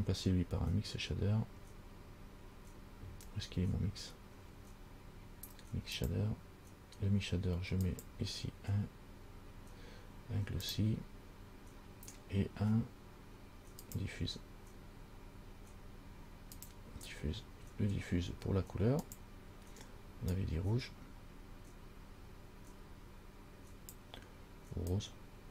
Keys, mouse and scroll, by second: 8.1 click, 14.1 click, 19.4 click.